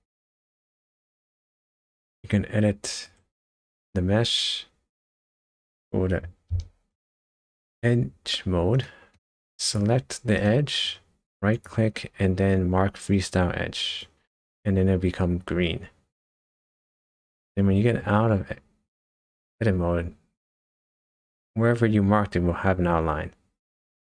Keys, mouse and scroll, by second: 0.2 KP_0, 1.7 click, 3.1 Tab, 5.1 middle click, 8.8 middle click, 9.6 click, 10.4 middle click, 10.9 scroll up 1, 11.5 right click, 19.5 Tab, 23.9-24.1 scroll down 3.